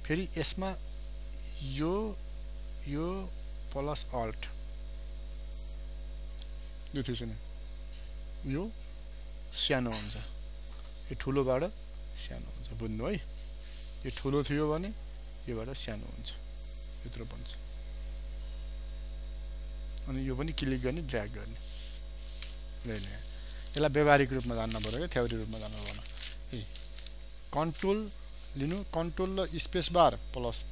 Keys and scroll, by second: 29.6 ctrl+space.